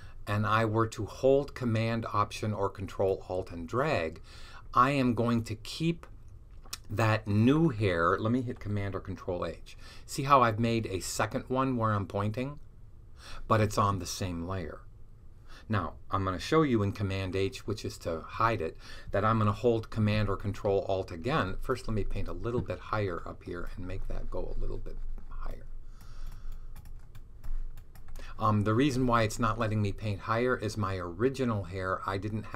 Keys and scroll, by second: 1.0 super+h, 9.4 super+h, 17.2 super+h.